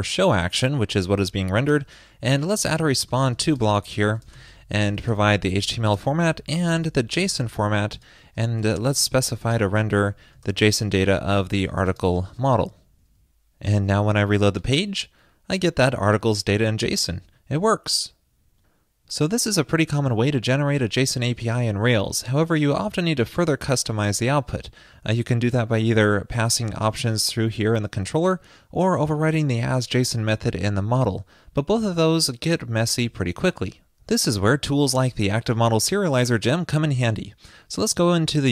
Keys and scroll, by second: 1.5 super+Right, 12.5 super+s.